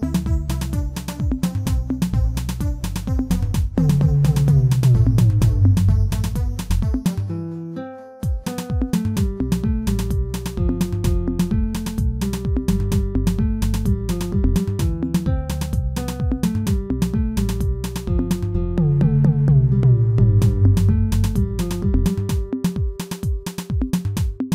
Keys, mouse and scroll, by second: 0.4 click, 3.4 shift+d, 5.1 s, 7.0 s, 9.3 p, 10.3 Tab, 10.7 click, 11.4 click, 13.0 h, 13.9 click, 14.5-15.0 scroll up 2, 15.0 click, 15.6 Tab, 15.9 shift+middle click, 16.4 Tab, 16.6-18.6 right drag, 18.6 ctrl+z, 18.9-20.6 right drag, 20.6 Tab, 21.1-22.4 shift+middle drag, 22.4 a, 23.2 m.